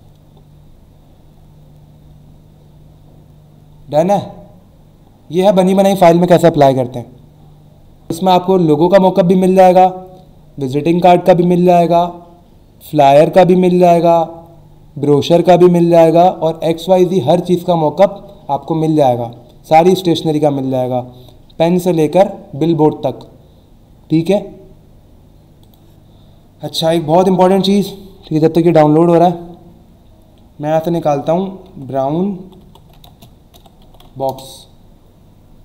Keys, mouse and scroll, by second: 0.8-1.5 scroll down 1, 1.8-2.4 scroll up 1, 3.1-3.6 scroll down 1, 4.3-5.2 alt+scroll down 3, 25.6 click, 31.7-33.5 typing, 34.3 Return.